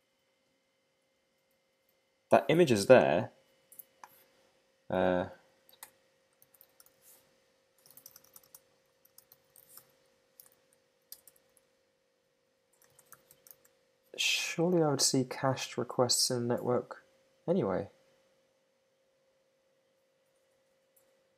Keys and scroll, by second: 5.0 Up, 5.8 Return, 10.5 alt+Left, 11.6 super+Right.